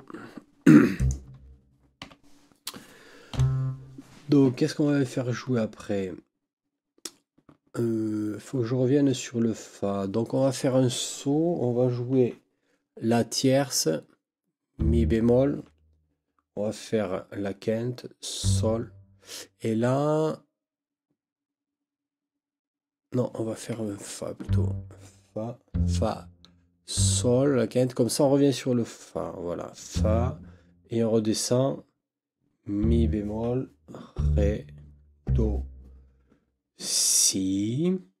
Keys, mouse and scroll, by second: 1.0 click, 2.0 n, 3.3 Right, 24.4 Left.